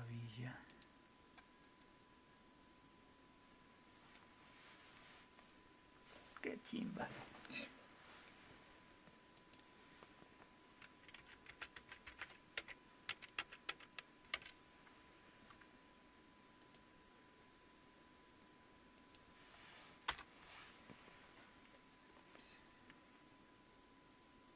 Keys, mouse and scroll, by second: 0.7 click, 9.4 click, 11.2-14.3 typing, 16.6 click, 19.0 click, 20.1 Return.